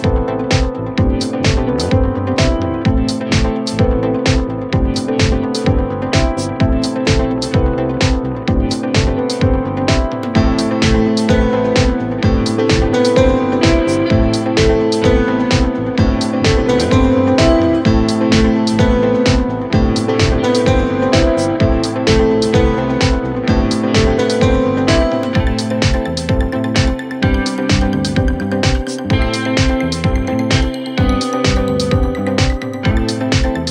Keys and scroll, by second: 3.0 ctrl+z.